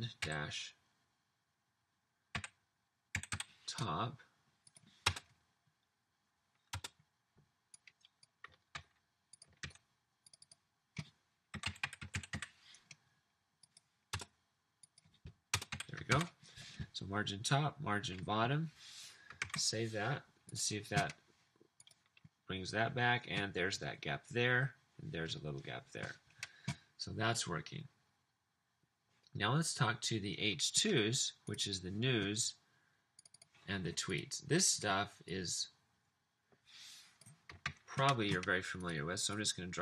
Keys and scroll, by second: 0.4 -, 2.4-3.8 typing, 5.2 BackSpace, 6.8 BackSpace, 8.8 super+c, 9.8 super+v, 11.4-12.8 typing, 14.2 BackSpace, 15.6 BackSpace, 15.7 t, 16.3 super+s, 19.5 super+s, 37.7 super+c.